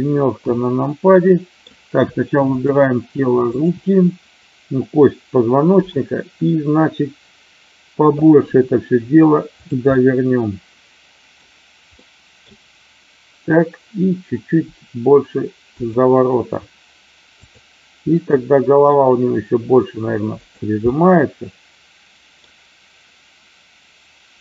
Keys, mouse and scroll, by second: 1.1 middle click, 2.5 click, 8.5 r, 9.9-11.3 middle drag, 12.0 middle click, 14.7 r, 15.8 click, 17.3 click, 18.2 middle click, 19.3 r, 20.4 click, 20.8-22.4 middle drag.